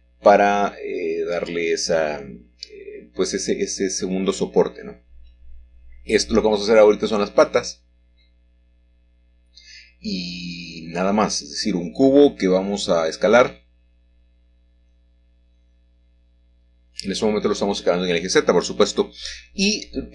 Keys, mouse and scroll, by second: 0.0 s, 1.6 y, 4.6 click, 7.0-8.4 shift+middle drag, 7.0-8.4 shift+scroll down 1, 9.2 middle click, 10.0 click, 12.1-13.7 middle drag, 15.2 ctrl+click, 15.8 ctrl+click, 17.4 middle click, 18.1-19.7 scroll down 1, 19.7 middle click.